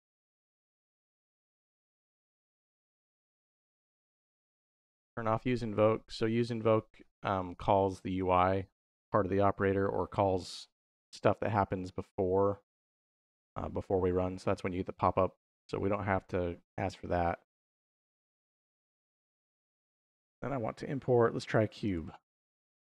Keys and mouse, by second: 2.3-3.5 drag, 4.9 click, 11.8-13.0 drag, 19.5 middle click, 20.0-22.4 drag.